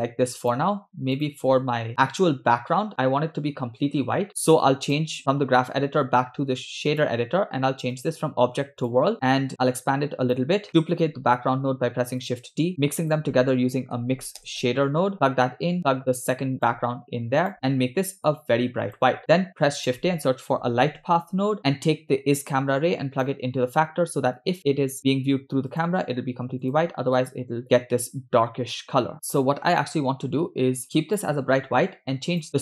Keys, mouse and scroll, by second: 0.5 click, 1.2 click, 7.1 click, 8.0-9.0 drag, 9.2 scroll up 6, 9.6 click, 10.8 middle click, 11.4 shift+d, 12.8 shift+a, 15.8-17.1 drag, 17.5 drag, 19.2 middle click, 19.5 shift+a, 22.4-23.7 drag, 24.5 click, 25.8 click, 26.7 click, 32.3-32.6 drag.